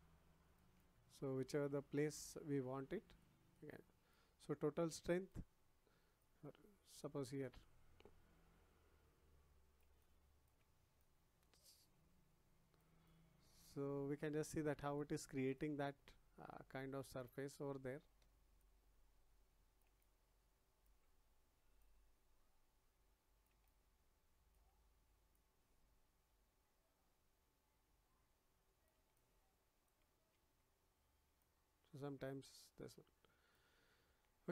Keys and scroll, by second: 1.9 ctrl+z, 30.3 ctrl+z.